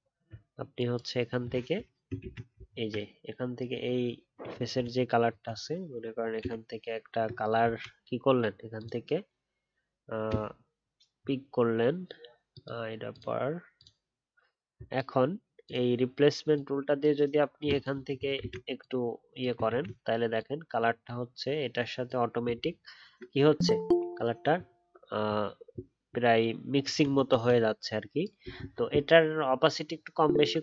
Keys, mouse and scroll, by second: 2.2 ctrl+z, 2.6 alt+scroll up 1, 19.7 ctrl+z, 22.6-23.4 alt+scroll down 1, 29.8 alt+scroll down 1, 30.3-30.6 alt+scroll up 1.